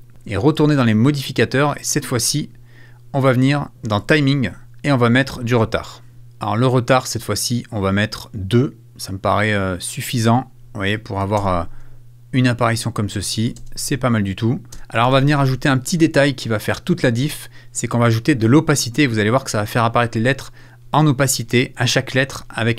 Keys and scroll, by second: 15.9 space.